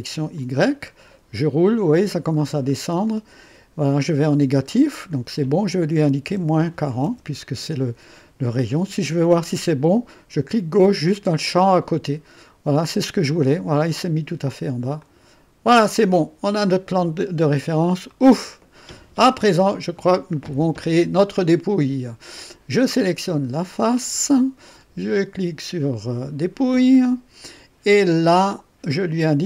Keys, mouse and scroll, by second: 0.3 click, 1.0-1.4 scroll down 1, 1.5-3.3 scroll down 5, 4.6 scroll down 2, 6.2 KP_Subtract, 6.5 KP_4, 7.0 KP_0, 11.7 click, 12.6-14.3 drag, 15.0 click, 16.0 click, 17.6 scroll up 1, 18.1-18.8 right drag, 23.9 click, 26.7 click.